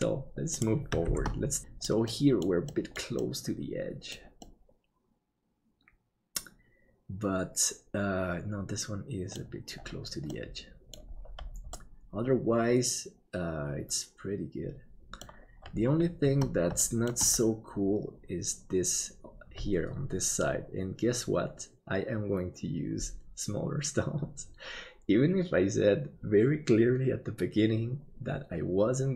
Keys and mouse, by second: 1.1 shift+d, 2.1 middle click, 2.9 middle click, 3.4 middle click, 4.4-9.5 middle drag, 10.4 middle click, 11.9-15.4 middle drag, 16.9 shift+middle click.